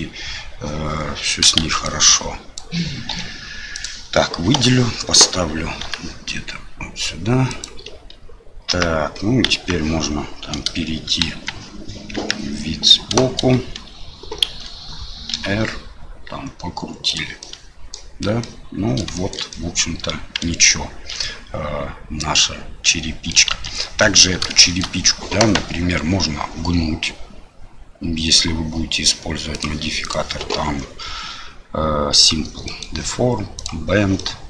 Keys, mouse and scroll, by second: 1.6 shift+z, 1.8 click, 3.1 Delete, 4.5 a, 5.8 g, 8.7 Tab, 9.4 KP_1, 11.2 KP_1, 12.1 KP_3, 14.4 shift+z, 15.3 r, 17.4-17.9 middle drag, 18.4-19.0 middle drag, 19.1 shift+middle drag, 19.5-23.3 middle drag, 23.5 ctrl+z, 24.0 middle drag, 24.6 shift+middle click, 29.6 click, 30.0-32.3 drag, 32.6 middle click, 33.5 click, 34.2-34.4 middle drag.